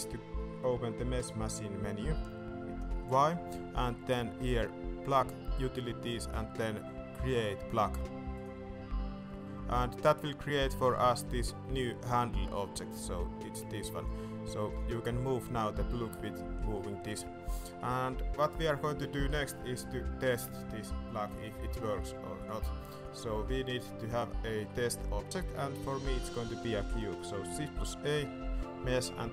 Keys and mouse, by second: 3.0 y, 12.7 Tab, 13.5 g, 14.4 alt+a, 15.4 g, 17.6 middle drag, 17.9 shift+middle drag, 18.9 middle click, 20.4 middle click, 20.6 shift+middle drag, 21.1 middle click, 21.4 shift+middle drag, 22.9 middle click, 23.4 shift+middle click, 24.1 middle click, 24.6 shift+middle click, 27.7 shift+a.